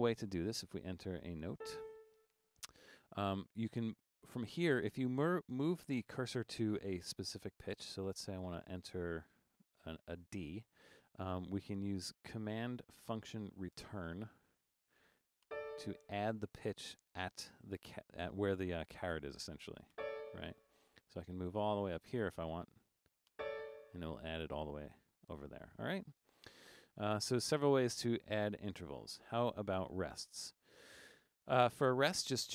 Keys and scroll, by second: 1.7 a, 4.0 Up, 4.2 Up, 4.3 Up, 4.6 Down, 4.8 Down, 5.0 Down, 5.3 Up, 5.4 Up, 5.6 Up, 5.9 Down, 6.1 Down, 6.3 Down, 6.5 Up, 6.7 Up, 8.2 Up, 8.3 Up, 8.5 Up, 9.2 Down, 9.4 Down, 17.7 Down, 20.8 Up, 20.9 Up, 21.1 Up, 21.2 Up, 21.4 Up, 21.7 Up, 21.8 Up, 21.9 Up, 22.1 Up, 22.2 Up, 22.5 Up, 26.9 Down, 27.2 Down, 27.2 Down, 27.3 Down, 27.5 Down, 28.0 Down, 28.1 Down, 28.3 Down, 28.4 Down, 28.7 Down, 28.9 Down, 29.0 Down, 30.8 Down, 31.3 5.